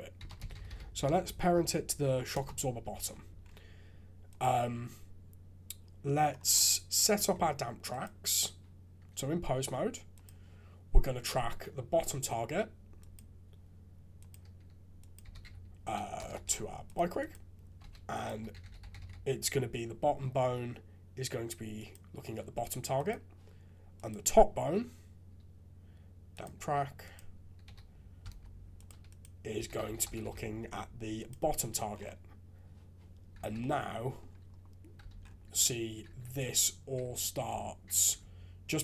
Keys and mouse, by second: 0.5 t, 4.3 click, 7.1 ctrl+Tab, 13.0-14.3 drag, 15.1-16.5 drag, 16.3 BackSpace, 16.5 right click, 16.5 BackSpace, 17.3 right click, 18.2-21.9 drag, 22.9 click, 23.9-26.4 drag, 27.1-28.8 drag, 29.1-31.3 drag, 33.3 shift+z, 33.6 middle click, 35.1 alt+a, 36.0-38.8 typing.